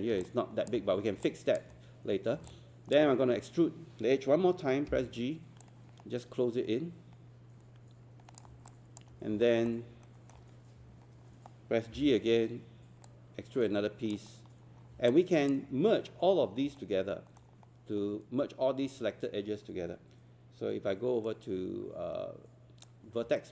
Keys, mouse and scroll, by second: 0.2 alt+click, 1.3 alt+click, 2.2 scroll up 1, 2.5 alt+click, 4.9 g, 5.6-8.5 drag, 8.7 alt+click, 9.1 scroll up 1, 9.5 alt+middle click, 9.7 scroll down 1, 10.1 alt+middle click, 10.5-10.8 scroll up 1, 11.9 g, 13.1 click, 14.3 scroll up 1, 14.7 scroll down 1, 15.1 alt+click, 16.1-16.4 scroll up 1, 16.4 scroll down 1, 16.8-18.0 alt+middle drag, 21.3-23.0 right drag, 23.4 alt+middle click.